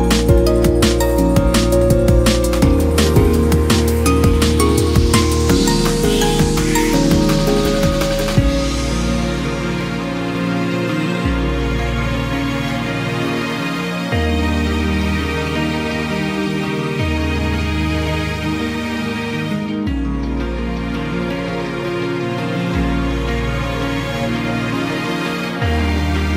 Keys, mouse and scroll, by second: 0.5 KP_1, 1.0-2.0 scroll up 4, 1.3 Tab, 2.1-2.5 shift+middle drag, 2.5-3.1 scroll up 1, 3.1-4.7 scroll up 2, 4.7 ctrl+r, 8.5 click, 9.1 click, 9.3-10.2 scroll up 3, 10.2 g, 12.1-12.7 scroll up 1, 13.7 g, 16.0 3, 16.4 click, 16.9-17.3 scroll down 4, 17.3 middle click, 17.9-18.3 scroll down 1, 18.3 shift+middle click, 18.6 scroll up 2, 18.8 middle click, 19.6 e, 19.9 s, 23.3 e, 23.6 s.